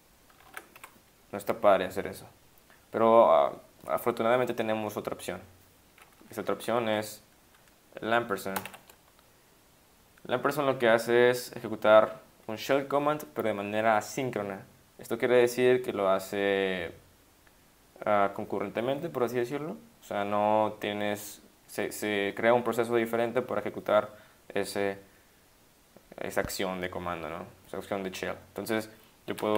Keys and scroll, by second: 0.4 ctrl+x, 0.8 1, 6.3 Down, 6.4 Down, 6.5 Down, 8.7 shift+7.